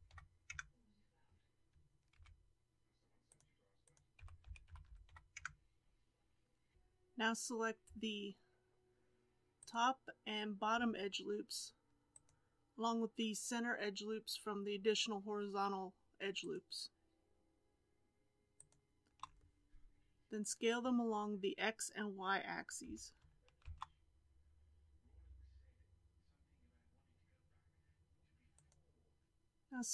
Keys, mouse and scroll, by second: 2.1 ctrl+r, 4.1 s, 6.7 alt+a, 9.7 alt+click, 12.1 alt+shift+click, 16.3 alt+shift+click, 18.5 alt+shift+click, 22.8 s, 29.3 3.